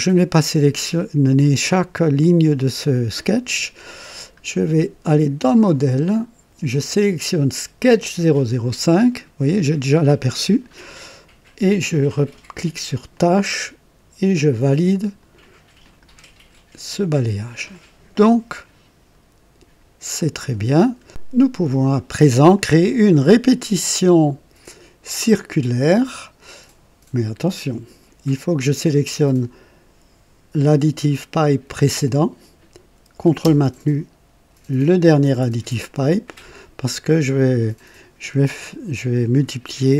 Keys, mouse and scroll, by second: 5.3 click, 7.9 click, 13.1 click, 14.5-15.4 drag, 15.8 click, 17.7-20.3 drag, 20.7 scroll up 2, 31.4 click, 34.8 ctrl+click.